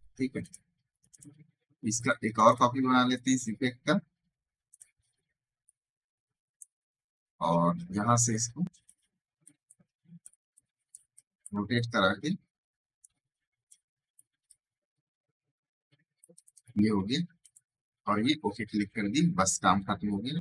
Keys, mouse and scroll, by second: 0.7 space, 0.8 right click, 1.0 click, 2.1 right click, 2.4 click, 5.5-7.0 ctrl+alt+shift+drag, 7.0 alt+scroll down 1, 7.7 alt+scroll down 1, 8.7-13.6 alt+drag, 13.6-16.2 alt+shift+drag.